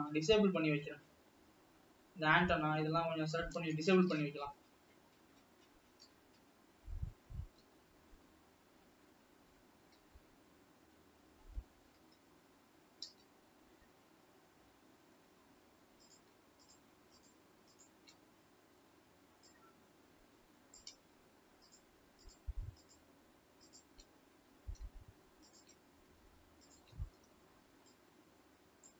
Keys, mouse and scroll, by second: 2.2 alt+a, 4.5-6.6 scroll down 5, 6.6 alt+a, 6.8 h, 9.0 l, 12.0 l, 13.3 l, 13.9 h, 15.1-17.2 scroll up 2, 18.2 click, 18.6 shift+click, 19.4 click, 21.7 shift+click, 22.4-23.4 shift+drag, 24.0 shift+click, 25.5 shift+click, 27.4 shift+click, 27.9 click.